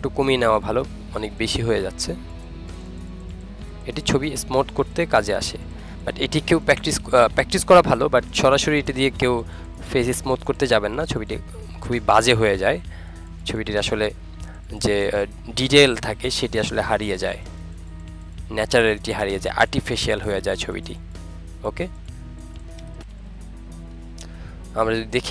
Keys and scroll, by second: 16.1 ctrl+alt+z, 22.8 ctrl+-.